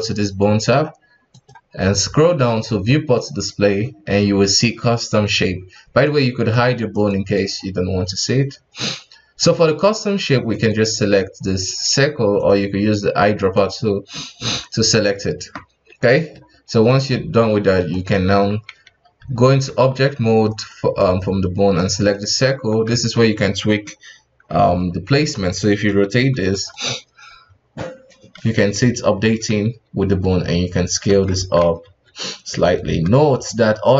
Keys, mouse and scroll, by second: 0.6-1.3 scroll down 2, 1.3-3.0 drag, 3.0-4.6 scroll down 4, 6.0 click, 6.5 click, 6.9 click, 7.3 click, 9.4-11.9 drag, 12.3 click, 14.2-14.7 middle drag, 14.7-15.2 scroll up 2, 15.8-16.1 scroll down 2, 16.1-16.9 middle drag, 16.9 right click, 17.5 ctrl+Tab, 17.9 right click, 18.2 Tab, 18.7 a, 19.1 Tab, 19.6 KP_1, 20.5 right click, 21.0 right click, 21.7 right click, 22.1 middle click, 22.5 KP_1, 22.9 Tab, 25.2 r, 27.8-29.5 middle drag, 29.5 s, 31.4 Tab, 31.8 s, 32.9 Tab, 33.2 s.